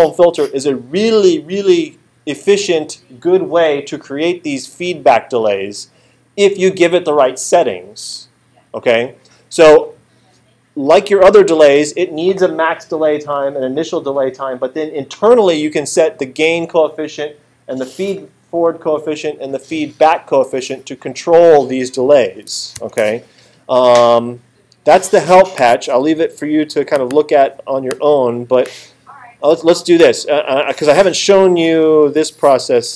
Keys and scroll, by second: 22.8 alt+super+8, 32.7 =.